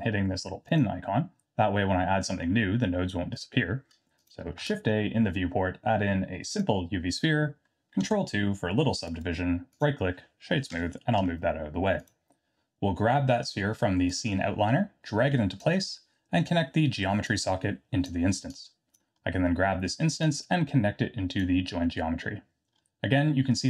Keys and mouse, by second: 0.7 click, 6.6 shift+a, 8.1 ctrl+2, 9.1 right click, 10.7 g, 14.1-15.6 drag, 17.2-18.0 drag, 18.5-19.0 drag, 20.3-21.4 drag.